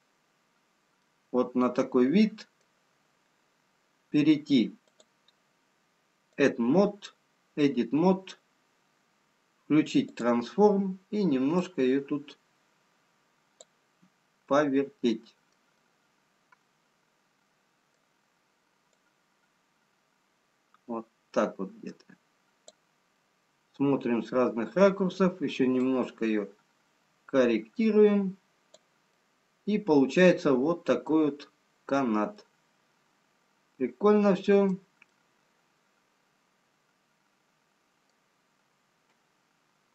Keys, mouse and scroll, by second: 0.4-1.7 scroll down 3, 1.7 middle click, 1.7-2.6 scroll down 1, 7.3 click, 10.1 click, 14.5 middle click, 16.1 middle click, 19.2 click, 23.2 middle click, 27.0 click, 29.5 middle click, 32.4-33.5 scroll down 1.